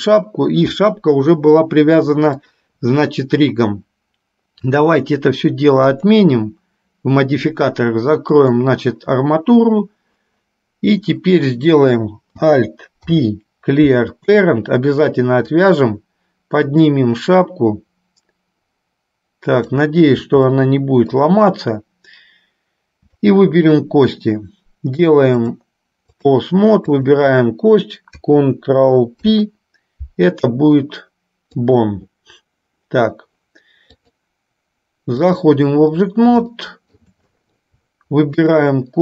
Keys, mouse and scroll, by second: 4.7-6.0 drag, 8.6 click, 13.2 alt+p, 15.6 click, 16.0-20.1 drag, 20.7 shift+middle click, 23.4 shift+click, 25.4-26.6 drag, 27.1 click, 29.2 ctrl+p, 34.0-35.6 drag, 36.7 shift+middle click, 38.6 click.